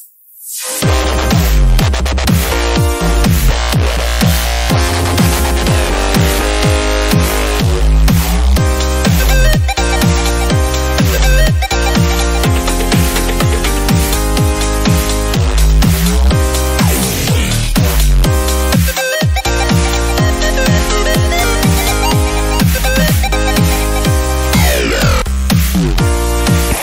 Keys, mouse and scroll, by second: 0.4-1.0 scroll down 1, 1.0 shift+middle click, 1.5-2.9 drag, 5.6 click, 5.8 scroll up 2, 6.1-7.1 middle drag, 7.1-11.1 drag, 11.1 middle click, 11.2-11.8 scroll up 1, 11.8 /, 12.1-13.6 middle drag, 13.6 click, 13.9 middle click, 14.3 click, 14.9 scroll down 2, 15.0 middle click, 15.1-15.6 scroll up 2, 15.6 shift+middle click, 16.1 click, 16.4 middle click, 17.2 click, 18.4 middle click, 18.7 right click, 19.4-20.4 drag, 22.0 click, 23.1-24.5 drag, 24.5-25.5 middle drag, 25.5 /, 25.9 click, 26.1 middle click, 26.6-26.8 scroll up 2.